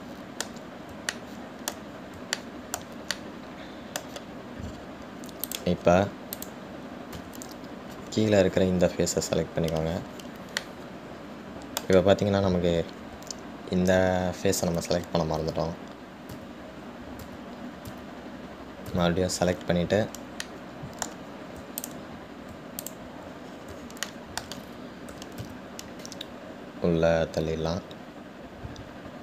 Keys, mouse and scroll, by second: 0.3-0.7 scroll down 2, 1.1-5.9 middle drag, 5.9-6.7 scroll up 4, 6.7 click, 7.6 click, 8.5 Tab, 11.9-14.9 middle drag, 18.0 ctrl+z, 21.7-23.1 middle drag, 23.1 shift+click, 24.0 shift+click, 24.7-25.3 scroll down 3, 25.3-26.4 shift+middle drag, 26.4 g.